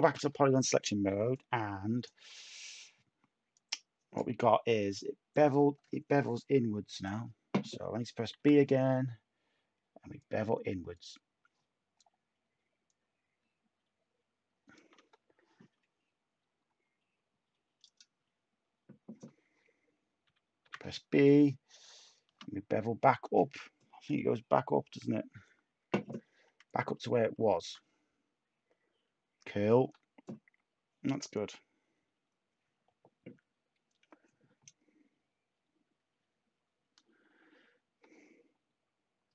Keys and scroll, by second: 8.3 b, 20.2 b, 20.6 b.